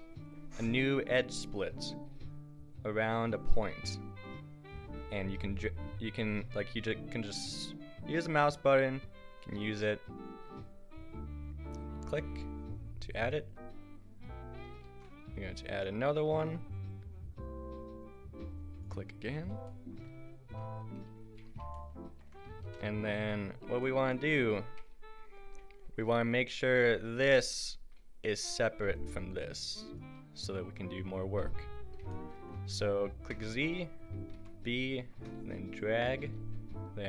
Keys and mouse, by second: 1.8-12.1 middle drag, 14.9 ctrl+r, 17.8 middle click, 21.2 a, 27.0-28.5 drag, 28.6 a, 29.0-31.5 drag, 31.5 a, 33.3 z, 34.4 b.